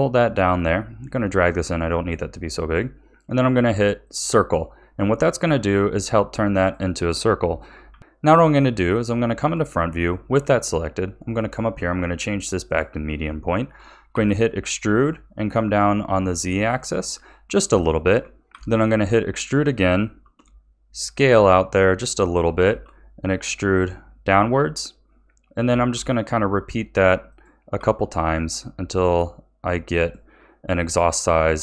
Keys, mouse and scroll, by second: 0.5-3.5 drag, 4.0 click, 7.8 KP_1, 8.0 ctrl+z, 9.1-11.3 shift+middle drag, 11.3-13.2 drag, 13.2 shift+middle click, 14.1 e, 17.8 shift+middle click, 18.5 e, 22.6 e, 25.6 e, 27.7 e.